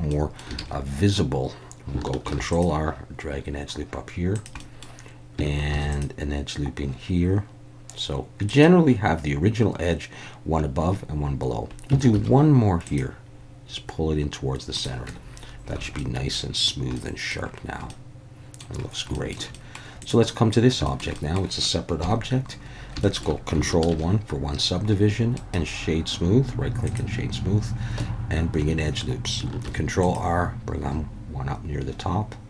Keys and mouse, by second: 0.1 middle click, 0.6 alt+a, 2.2 ctrl+r, 4.3 click, 4.7 middle click, 5.7 ctrl+r, 8.5 click, 12.2 ctrl+r, 14.7 click, 15.1 Tab, 15.8 alt+a, 16.0-16.3 middle drag, 16.9-17.3 middle drag, 17.9-18.6 middle drag, 19.1 shift+middle drag, 19.5 middle click, 20.0 click, 20.8 shift+middle click, 21.2 middle click, 22.0 KP_1, 23.0 shift+middle drag, 23.9 ctrl+1, 25.4-27.0 right drag, 28.0 Tab, 29.6 ctrl+r.